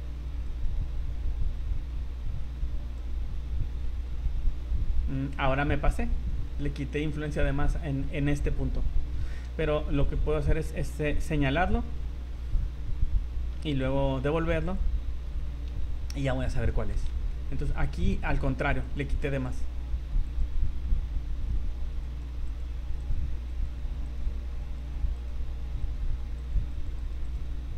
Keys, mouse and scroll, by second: 0.5 click, 3.4 scroll up 2, 3.8 middle click, 4.2 scroll down 2, 4.5 middle click, 5.6 scroll up 2, 6.6 middle click, 8.1-8.4 scroll up 4, 9.4 v, 10.0 right click, 11.9 scroll down 2, 12.2-12.5 scroll up 2, 12.6 scroll down 2, 13.6 v, 14.7 click, 15.8 v, 16.1-16.5 scroll up 6, 16.7 shift+middle click, 17.1 z, 18.3 click, 18.8 click, 20.3 click, 21.7 ctrl+z, 22.0 click, 22.4 click, 23.0 right click, 23.5 click, 24.1 right click, 24.6 click, 25.1 right click, 25.8 right click, 26.4 click, 26.7 click, 27.0 click, 27.2 click.